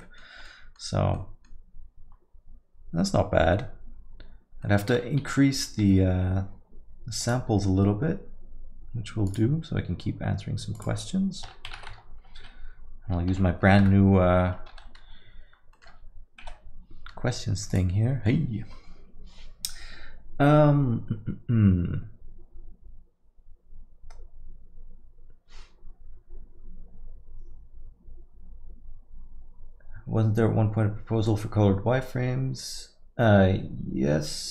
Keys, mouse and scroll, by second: 5.2 scroll down 1.